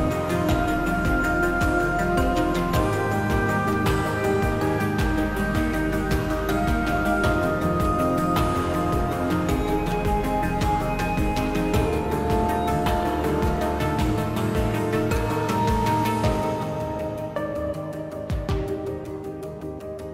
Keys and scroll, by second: 1.5 3, 13.8 4, 14.1 s, 19.7 s.